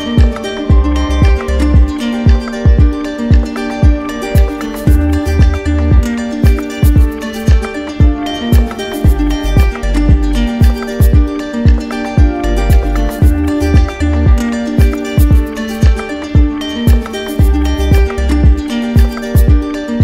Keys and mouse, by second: 2.2 click, 2.7 click, 4.6 click, 6.4 click, 9.6 click, 11.0 click, 13.9 click, 15.0 click, 15.6 click, 17.0 click, 17.8 click, 19.1 click.